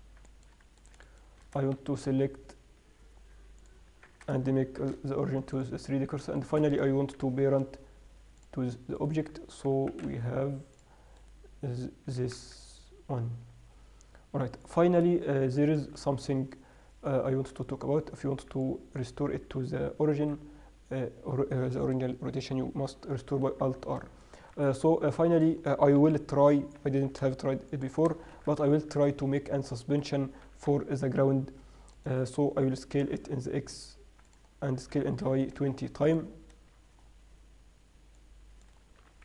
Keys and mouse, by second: 1.1 right click, 2.0 shift+s, 4.2 Tab, 6.6 right click, 7.4 ctrl+p, 9.2-11.2 right drag, 10.2 g, 11.5-13.2 right drag, 12.4 r, 15.2-21.1 middle drag, 20.5 alt+r, 24.5 middle drag, 26.3 KP_7, 28.6 shift+c, 28.9 shift+a, 30.8 g, 33.2 s, 35.2 s, 38.4-39.2 drag.